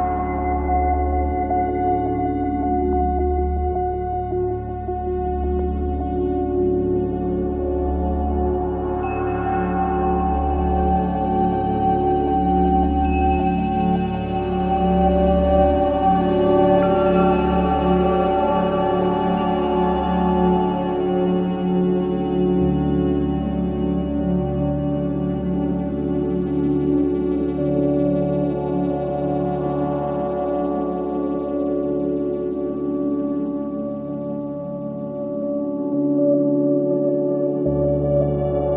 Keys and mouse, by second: 3.8 click, 4.8 shift+click, 8.7 e, 11.1 click, 11.8 shift+click, 12.4 shift+click, 12.9 shift+click, 13.9 shift+click, 14.4 shift+click, 15.0 shift+click, 15.5 shift+click, 16.5 e, 22.5 Tab, 23.5 Tab, 26.8 click, 28.4 shift+click, 29.6 shift+click, 30.4 x, 33.9 click, 34.3 click, 34.8 shift+click, 35.3 shift+click, 36.1 x, 38.5 Tab.